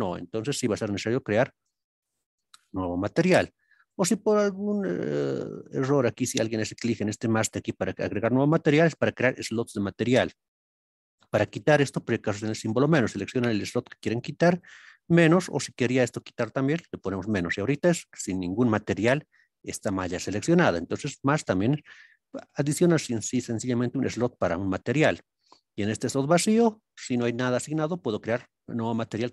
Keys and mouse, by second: 1.9 click, 8.2-11.5 drag, 13.1 click, 13.6 click, 15.2 click, 16.7 click, 21.6 click, 25.9 click, 28.4-29.3 drag.